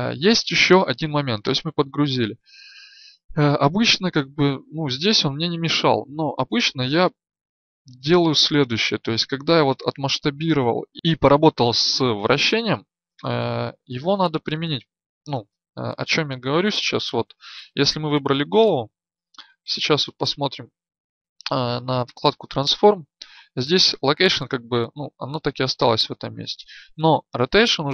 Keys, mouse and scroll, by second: 8.6 right click, 16.7 n, 20.1-27.9 drag.